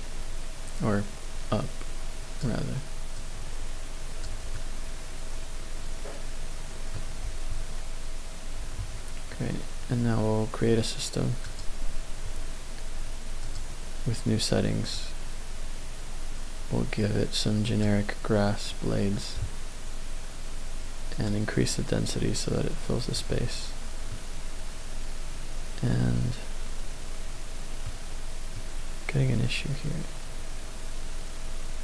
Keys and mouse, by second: 3.2-4.2 drag, 4.6-6.9 middle drag, 7.2 Tab, 8.6 Tab, 11.4 click, 13.4 click, 14.9-18.4 drag, 21.3-23.2 drag, 24.1-27.6 middle drag, 28.5-31.8 middle drag.